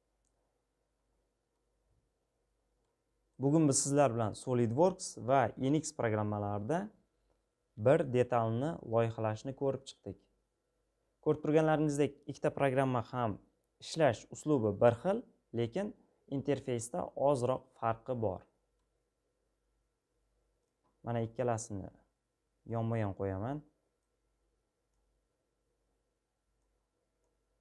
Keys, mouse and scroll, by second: 11.0-14.6 middle drag, 14.6-15.6 scroll, 18.4-20.4 middle drag, 20.4-24.0 drag, 24.6-27.6 drag.